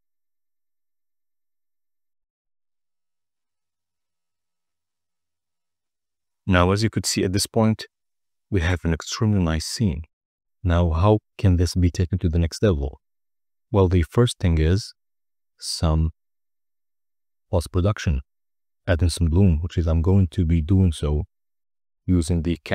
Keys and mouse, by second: 15.5 n, 17.9 click, 19.9 click.